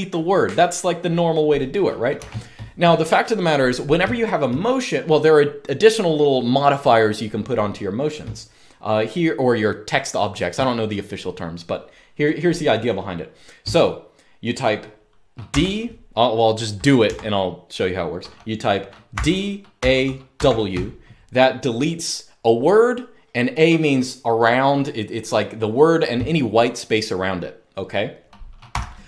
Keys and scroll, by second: 1.9 u, 15.2 d, 16.9 Escape, 18.8-20.1 typing, 28.4 u.